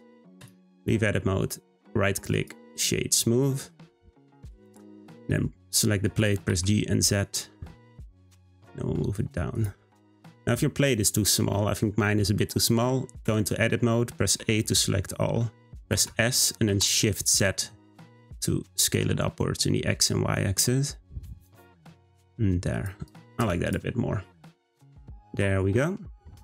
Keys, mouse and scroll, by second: 0.4-2.7 right drag, 2.7 click, 3.2-4.4 middle drag, 4.4 click, 5.3-6.0 scroll up 1, 6.0 g, 9.8-10.1 scroll down 2, 10.1-13.1 middle drag, 13.2 Tab, 14.4 a, 15.0 middle click, 15.9 s, 23.0 click, 23.4 Tab, 23.6 click, 24.0-24.3 scroll down 2, 24.3-26.4 middle drag.